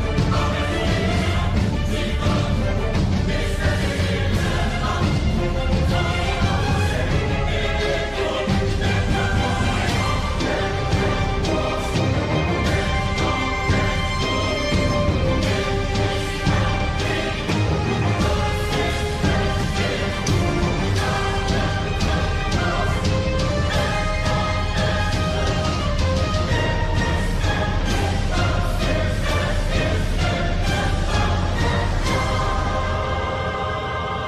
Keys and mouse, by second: 0.7 g, 4.0 middle click, 8.8 KP_3, 9.9 g, 11.5 middle click, 13.2 shift+click, 14.6 KP_3, 15.2 g, 19.1 middle click, 20.6 KP_7, 21.1 3, 21.7 shift+middle click, 22.5 shift+middle click, 24.6 ctrl+r, 28.9 3, 30.5 KP_3.